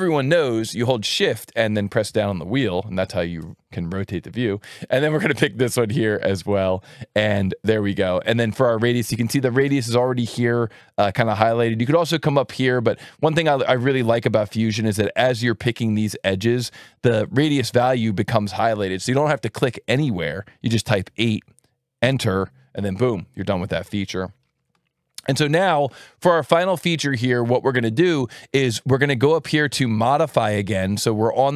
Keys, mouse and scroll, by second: 6.5 click, 13.3 click, 15.8 click, 17.1 click, 20.9 KP_8, 22.0 KP_Enter, 30.8 alt+1.